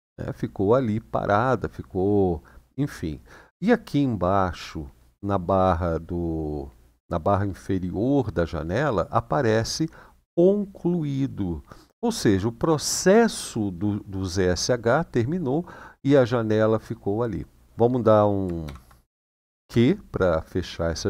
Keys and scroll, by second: 18.4-19.3 typing.